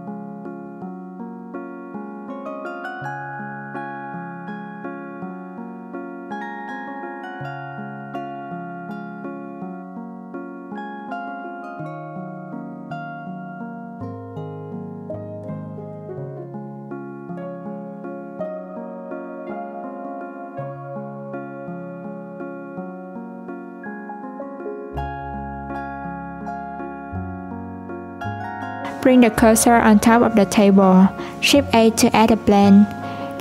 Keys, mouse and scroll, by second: 0.8 click, 2.0-3.8 drag, 5.5 Tab, 6.5-7.9 drag, 8.4 alt+z, 9.0 click, 12.2-13.9 scroll down 1, 13.9 click, 14.6 shift+click, 15.4 click, 26.5 click, 27.8 click, 30.2 shift+s, 31.4 shift+a.